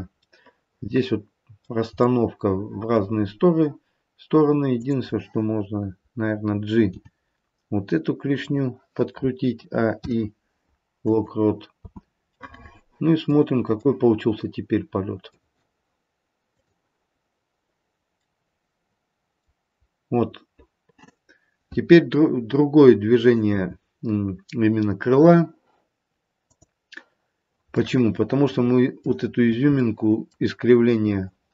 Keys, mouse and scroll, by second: 0.3 middle click, 2.1 middle click, 4.6 click, 6.9 g, 9.5 a, 9.9 i, 11.8 space, 12.2 middle click, 13.2 middle click, 13.8 middle click, 16.5 click, 18.2 middle click, 19.8-21.2 scroll up 1, 24.3-26.3 scroll down 1, 26.3 click, 27.7 middle click, 27.7-28.5 scroll down 3, 28.5 middle click, 29.3-31.5 scroll up 5, 29.8 middle click.